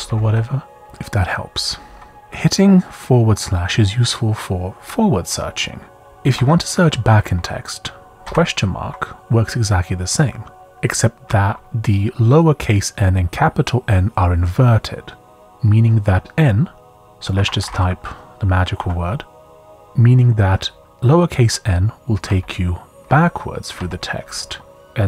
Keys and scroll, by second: 1.5 j, 2.2 k, 3.9-4.6 typing, 6.1 BackSpace, 6.3 BackSpace, 8.2 shift+/, 17.1-18.2 typing, 18.8 Return, 21.0 typing, 22.2-24.8 typing.